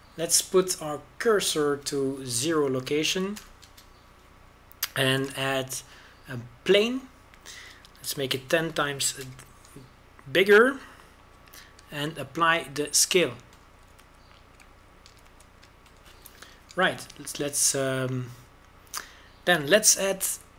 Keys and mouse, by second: 2.6-6.8 drag, 6.8 shift+a, 9.7 s, 13.7 ctrl+a, 15.2-17.1 drag, 15.6 shift+a, 16.9 ctrl+a.